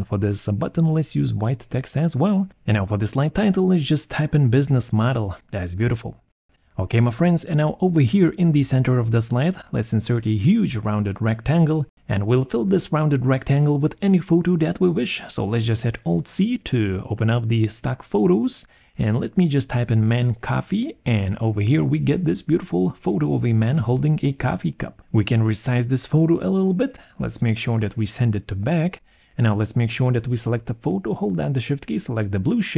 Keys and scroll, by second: 2.4 ctrl+a, 2.4-6.4 typing, 5.0 Return, 16.8 alt+2, 19.1-20.9 typing.